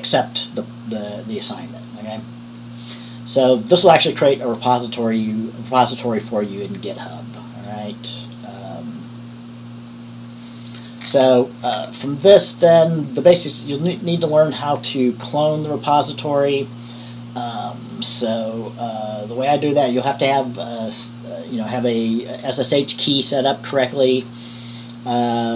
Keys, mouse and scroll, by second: 1.6-2.8 drag, 3.8 click, 11.3-11.6 scroll up 2, 11.5 middle click, 11.8 middle click, 12.0-15.3 scroll down 1, 15.5 click, 16.4 click.